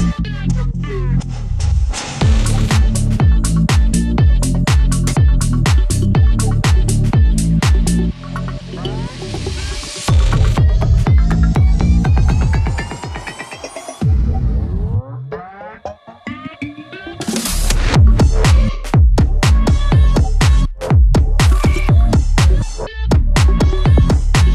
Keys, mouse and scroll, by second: 1.8 scroll up 1, 2.6-4.1 drag, 4.1 scroll up 1, 4.5-6.2 drag, 6.2 scroll up 1, 7.7 click, 9.0 ctrl+z, 9.5 scroll up 1, 10.1 click, 11.3-15.7 drag, 15.7 scroll down 1, 18.5 scroll up 1, 19.2 shift+F2, 21.0 click, 21.5 right click, 22.1 click, 23.5 Tab.